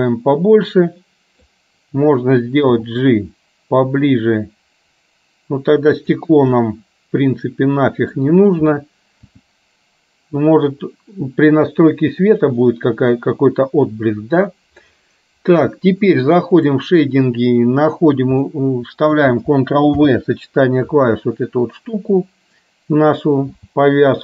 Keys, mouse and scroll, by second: 0.2-1.5 middle drag, 2.8 g, 6.7-8.3 middle drag, 8.3-9.4 scroll down 1, 9.4 g.